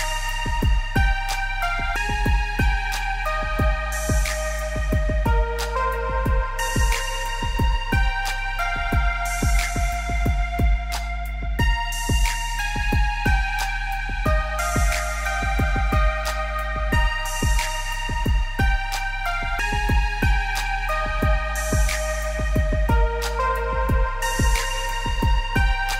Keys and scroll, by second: 0.5 ctrl+z, 7.0 ctrl+z, 7.6 ctrl+z, 9.5 ctrl+z, 10.9 ctrl+z, 12.5 ctrl+z.